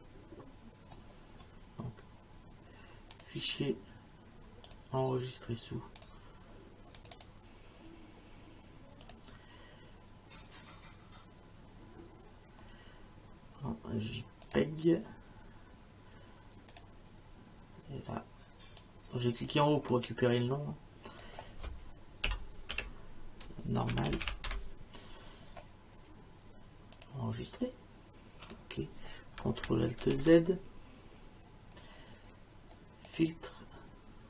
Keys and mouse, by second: 3.2 click, 4.7 click, 6.0 click, 9.1 click, 14.5 click, 16.7 click, 18.8 click, 19.9 click, 22.3-25.0 typing, 27.0 click, 28.5 click, 30.0 ctrl+alt+z, 33.1 click.